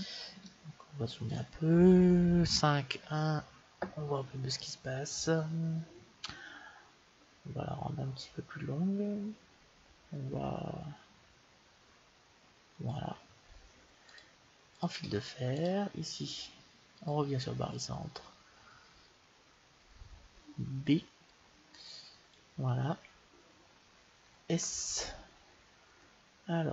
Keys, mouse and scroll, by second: 2.4 KP_5, 2.9 KP_1, 6.3-8.1 drag, 14.0 click, 17.0 click, 20.8 b, 24.4 s.